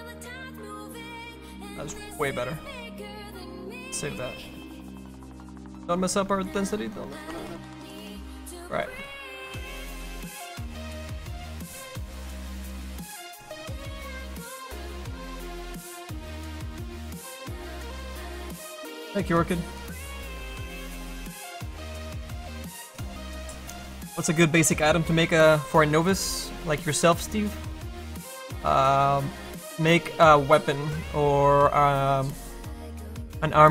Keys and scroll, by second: 8.7 z.